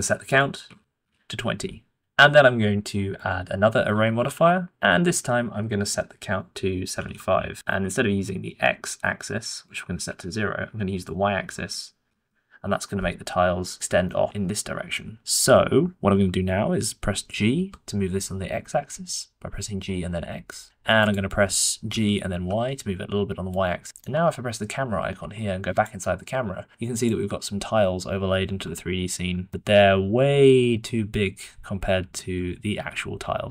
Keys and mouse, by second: 0.4 click, 3.8 middle click, 4.2 r, 6.2-7.3 middle drag, 9.3 middle click, 11.0-12.1 middle drag, 13.2 middle click, 13.7-14.0 shift+drag, 14.0-14.9 middle drag, 15.6-17.5 shift+middle drag, 17.5 g, 21.8 g, 23.8 shift+middle click, 25.7-27.0 middle drag.